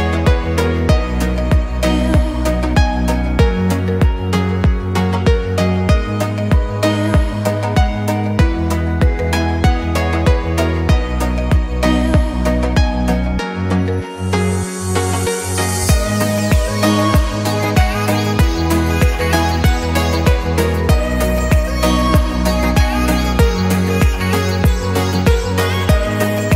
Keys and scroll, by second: 3.5 Escape, 5.2 Delete, 7.8 o, 14.6 Escape, 16.3 Delete, 18.6 o.